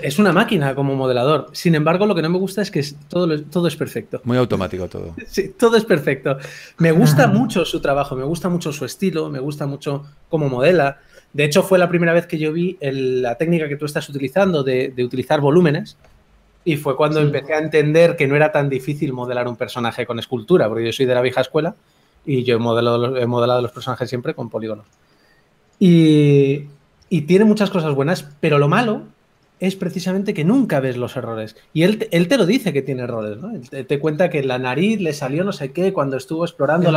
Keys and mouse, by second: 0.2 s, 1.2 s, 2.4 s, 3.7 s, 6.1 g, 11.4 r, 12.4 g, 14.0 s, 15.8 a, 16.4-17.8 right drag, 16.8 s, 17.8 a, 18.5 ctrl+s, 24.5 click, 24.9 ctrl+1, 27.0 click, 27.8 g, 27.8 f, 29.6 ctrl+a, 31.4 click, 34.1 click, 34.5 g, 34.7 f, 35.7 f, 36.2 click.